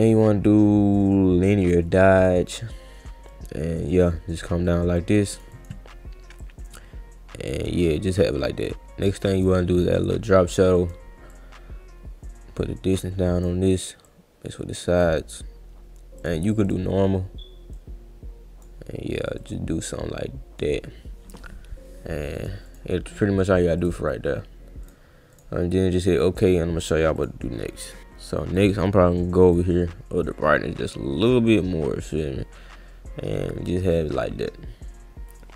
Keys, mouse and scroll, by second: 1.6 click, 3.3 click, 4.9-5.4 drag, 5.5 click, 6.4-7.8 drag, 9.4 click, 9.7 click, 10.8 click, 11.3 click, 14.0 click, 16.2 click, 16.7 click, 17.7 click, 19.4 click, 22.3 click, 22.7 click, 23.8 click, 24.8 click, 25.4 click, 26.1 click, 27.2 click, 28.6 click, 29.4 click, 30.3-33.9 drag.